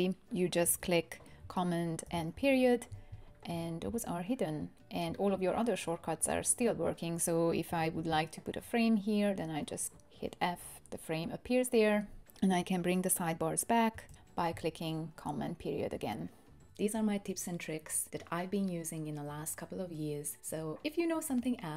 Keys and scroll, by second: 2.0 super+., 7.9 f, 10.8 BackSpace, 14.1 super+..